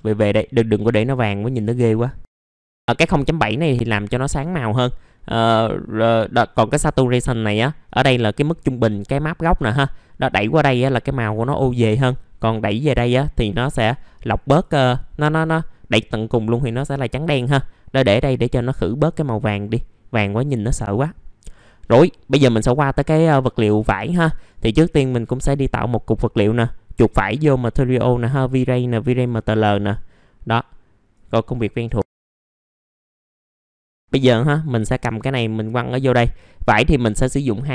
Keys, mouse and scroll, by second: 5.3 middle click, 7.8-13.8 drag, 19.5 middle click, 19.6 scroll down 1, 20.6 middle click, 20.8 middle click, 21.4 click, 21.8 middle click, 22.2 scroll up 1, 22.6 middle click, 24.8-31.8 drag, 32.7 middle click, 33.0 click, 33.3 middle click, 33.9-37.7 drag.